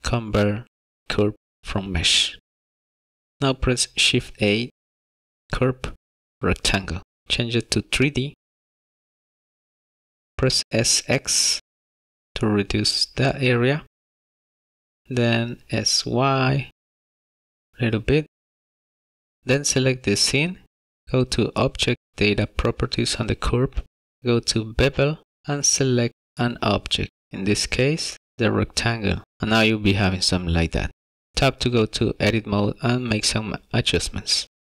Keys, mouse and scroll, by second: 4.1 shift+a, 9.4 click, 10.5 s, 11.1 x, 13.1 s, 16.7 y, 18.9 s, 19.4 Tab, 20.2 click, 27.1 click, 30.1 middle click, 31.3 click, 31.3 scroll down 1, 31.6 Tab, 33.6 s.